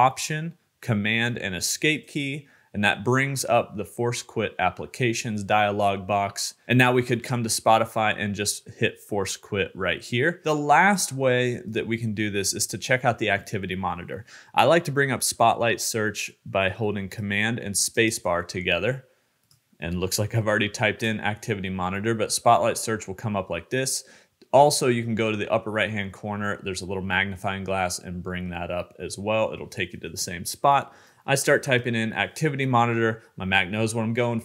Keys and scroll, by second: 0.1 alt+super+Escape, 16.7 super+space.